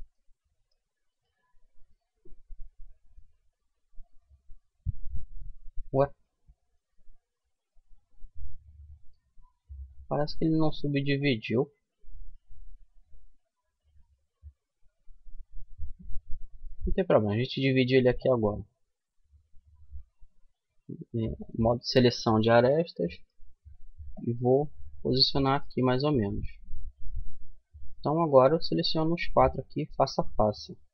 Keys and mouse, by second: 2.8 middle click, 3.4 click, 4.2-6.0 middle drag, 10.5-11.5 drag, 11.5 middle click, 12.4-13.4 right drag, 16.1 w, 20.7-22.6 drag, 22.6-24.3 right drag, 23.4-25.0 drag, 25.0-27.3 middle drag, 30.3-30.9 drag.